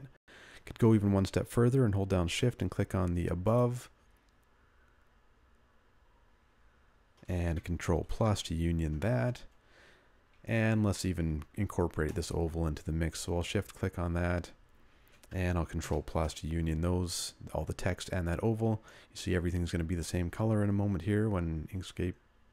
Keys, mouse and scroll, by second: 0.9 g.